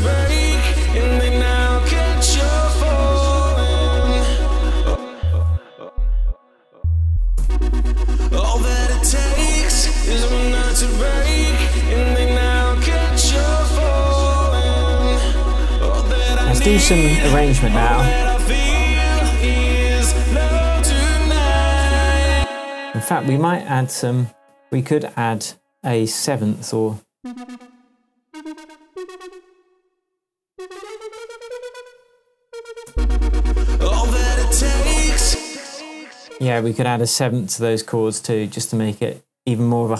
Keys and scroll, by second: 4.8 space, 5.5 shift+space, 5.9 shift+Down, 7.0 shift+Down, 7.4 shift+space, 8.2 shift+Tab, 10.5 super+d, 22.3 space, 32.4 alt+Down, 32.9 space, 35.2 space.